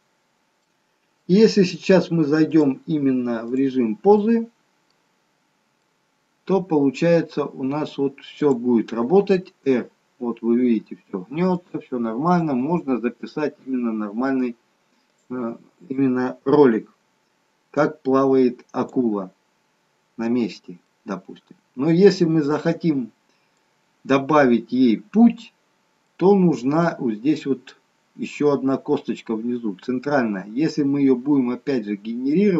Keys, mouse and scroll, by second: 0.5 middle click, 2.6 click, 4.1 middle click, 5.0-5.8 scroll down 5, 5.8 middle click, 7.4 scroll up 2, 8.5 click, 9.7 r, 12.2 click, 12.5 r, 18.0 click, 20.9 middle click, 24.2-24.9 scroll up 2, 26.0 middle click, 31.6-32.5 scroll down 3.